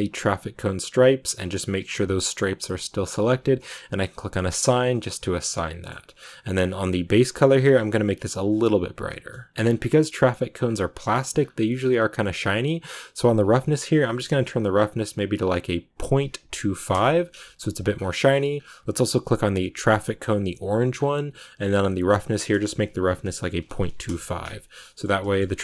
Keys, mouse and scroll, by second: 4.3 click, 4.5 scroll down 1, 4.8 middle click, 5.8 scroll up 3, 8.0 click, 8.8 scroll down 1, 8.9 middle click, 9.5 Tab, 9.5-10.0 scroll down 1, 10.0 middle click, 10.5-11.2 scroll up 1, 18.9 scroll up 10, 19.6 click, 24.0 click, 24.7 middle click, 24.9 a, 25.2-25.6 shift+middle drag.